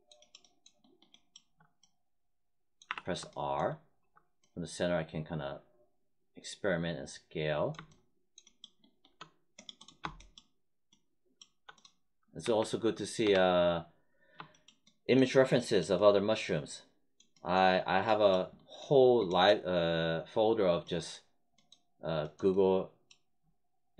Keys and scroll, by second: 2.9 r, 12.4 1, 13.2 3.